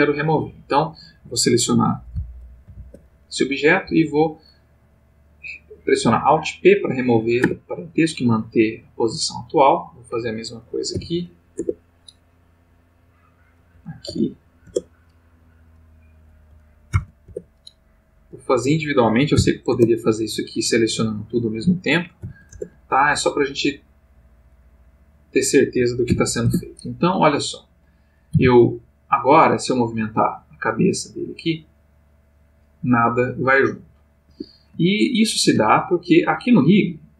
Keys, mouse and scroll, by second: 0.0 click, 2.6 alt+p, 3.8 Down, 7.4 Return, 9.4 click, 10.9 alt+p, 11.5 alt+Return, 12.9 click, 14.0 alt+p, 14.6 alt+Return, 15.7 click, 16.9 alt+p, 17.3 alt+Return, 18.3 click, 19.3 alt+p, 19.7 alt+Return, 20.8 click, 22.2 alt+p, 22.5 alt+Return, 23.6 click, 24.5 click, 26.1 alt+p, 26.4 alt+Return, 27.6 click, 28.3 r, 34.3 Escape, 34.9 ctrl+middle click.